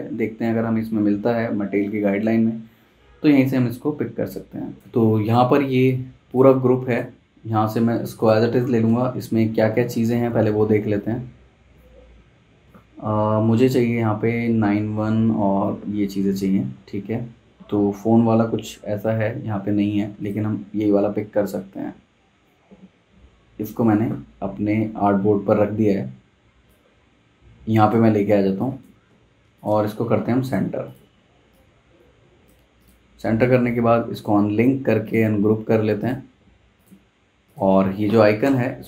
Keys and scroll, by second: 9.4 super+Tab, 10.1 super+Tab, 23.9 super+v, 28.1 z, 28.3 z, 29.1 v, 38.4 BackSpace.